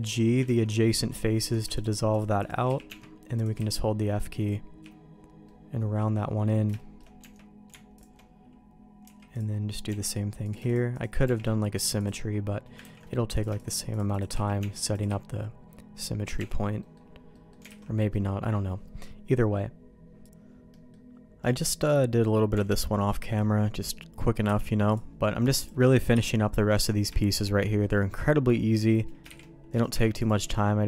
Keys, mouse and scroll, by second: 0.4 ctrl+x, 1.5 shift+click, 2.1 shift+click, 2.6 f, 2.8 Tab, 3.3 click, 3.5-5.4 f, 5.4 middle click, 6.7 shift+middle click, 7.1 Tab, 7.9 alt+click, 9.0 x, 9.8 Tab, 10.4 click, 10.6 shift+click, 11.2 shift+g, 12.8 ctrl+x, 13.3 click, 13.9 shift+click, 14.3 f, 14.5 Tab, 14.9 click, 15.0-16.3 f, 16.3 Tab, 16.7 middle click, 17.3 middle click, 17.6 alt+a, 18.1 middle click, 20.7 middle click, 21.4 middle click, 22.1 middle click, 22.5 Tab, 23.2 middle click, 24.4 h, 24.9 click, 26.1 h, 26.8 click, 27.2 shift+middle click, 27.6 middle click, 27.9 middle click, 29.3 shift+d, 29.9 m.